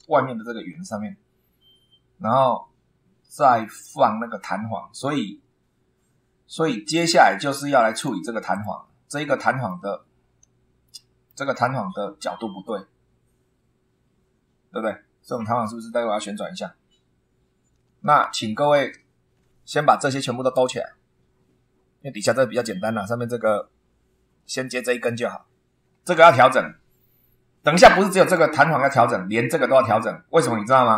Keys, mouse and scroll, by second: 0.0 super+2, 3.8-4.6 scroll down 3, 7.9 click, 8.5 click, 9.3 shift+middle click, 9.9 shift+scroll up 1, 10.8 shift+middle click, 17.8 scroll down 1, 18.3 shift+middle click, 28.1-28.6 scroll down 2.